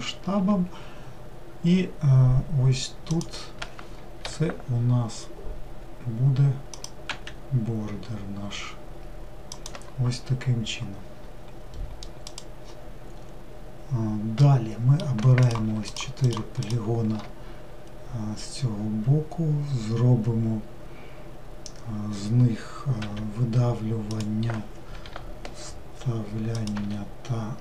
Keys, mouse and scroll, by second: 15.1 click, 15.6 shift+click, 16.0 shift+click, 16.4 shift+click.